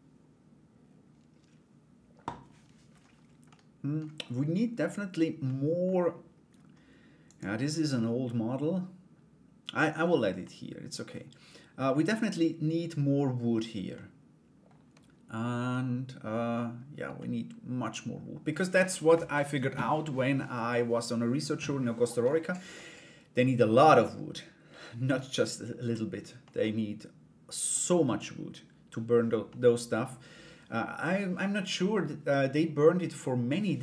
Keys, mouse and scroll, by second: 3.1 middle click, 5.0 middle click, 6.8 right click, 7.5-9.4 middle drag, 10.0 middle click, 13.5 middle click, 15.3 middle click, 16.7-18.1 middle drag, 22.3 middle click, 23.6-25.4 middle drag, 26.0-27.3 middle drag, 29.0 middle click, 30.3 middle click.